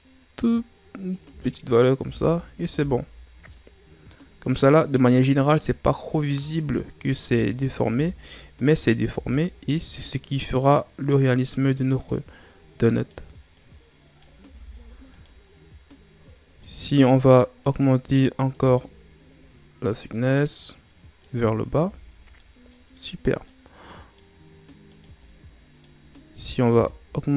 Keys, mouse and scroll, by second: 1.9 Tab, 2.6 a, 2.9-3.5 scroll down 2, 3.5-6.5 middle drag, 6.6-7.1 scroll up 1, 7.1 Tab, 7.8 Tab, 8.1-8.6 scroll up 2, 8.6 right click, 9.0 Tab, 9.8 right click, 13.5 right click, 14.4 Tab, 15.0 right click, 16.0-16.6 scroll down 3, 16.6 middle click, 17.5-21.5 drag, 21.7 a, 22.1 scroll down 1, 22.4 middle click, 23.2 scroll down 1, 23.4 middle click, 24.2-24.8 scroll up 3, 24.8 right click, 25.1-26.6 middle drag, 26.6-27.3 shift+drag.